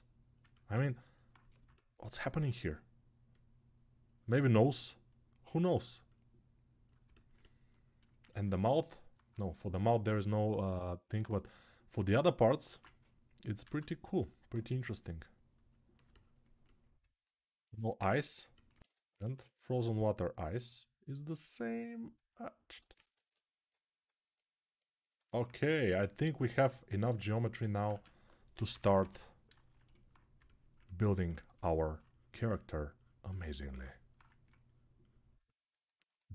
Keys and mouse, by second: 5.5-12.6 right drag, 12.4 ctrl+Tab, 13.4 q, 15.5-19.9 middle drag, 17.8 alt+q, 19.0 shift+r, 20.7-25.5 middle drag, 24.4 ctrl+r, 25.5-30.2 shift+right drag, 27.7-28.8 typing.